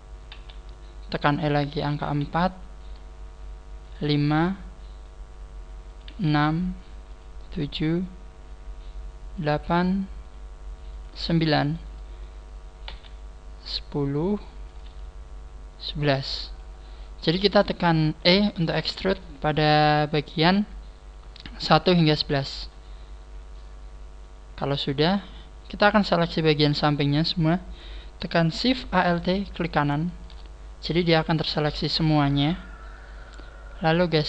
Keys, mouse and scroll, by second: 0.3 e, 3.9 click, 6.0 click, 6.1 e, 7.2 click, 7.4 e, 9.5 click, 9.7 e, 11.1 click, 11.3 shift+middle click, 12.9 e, 14.9 click, 16.5 click, 18.9 scroll down 4, 29.7 alt+shift+right click.